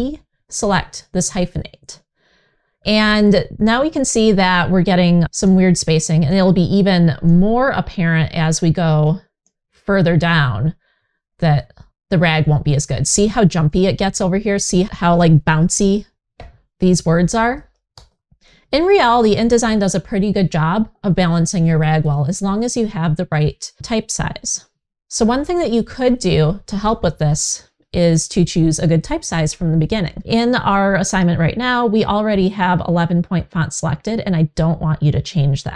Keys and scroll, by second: 17.2 super+z.